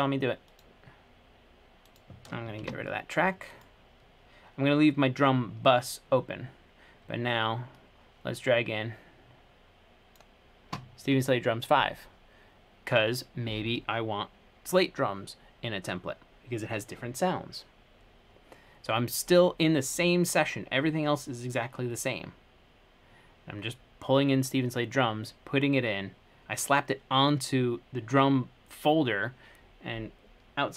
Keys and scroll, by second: 2.6-3.3 typing.